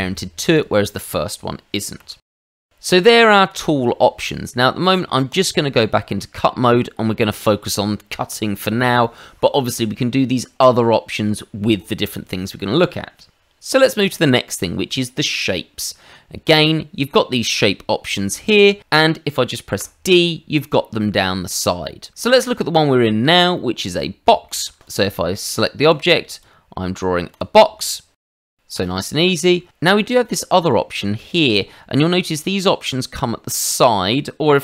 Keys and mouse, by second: 0.0 Escape, 0.5 click, 2.0 ctrl+z, 2.2 ctrl+z, 3.4 click, 5.3 click, 6.7 middle click, 7.2 shift+middle click, 16.4 click, 19.8 d, 23.5 shift+middle click, 23.9 middle click, 24.4 shift+middle click, 24.8 click, 25.8 click, 27.3 click, 28.7 ctrl+z.